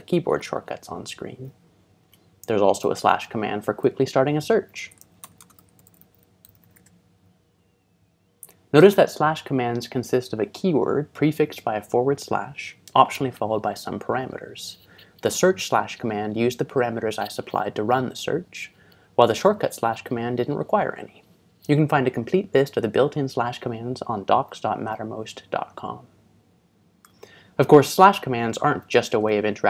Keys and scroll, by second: 2.1 Escape, 4.3-7.2 typing, 8.8 typing, 24.8 ctrl+Tab, 29.1 ctrl+shift+Tab.